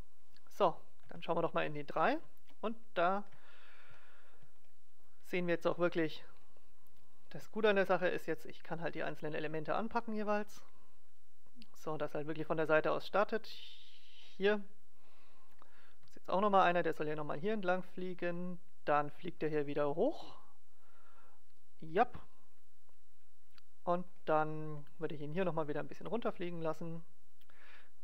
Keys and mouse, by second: 1.1 KP_3, 2.5 click, 7.0 right click, 7.3 g, 7.5-8.7 right drag, 8.7-10.2 drag, 9.6 g, 10.2-11.3 right drag, 11.9-13.7 drag, 14.1-15.6 middle drag, 15.9 g, 16.9 right click, 17.4-19.1 drag, 19.9 right click, 20.1 g, 20.5-21.5 drag, 21.7-23.7 middle drag, 23.7 click, 24.1 middle click, 24.2 click, 24.9 middle click, 25.3 g, 25.5 click, 25.7 right click.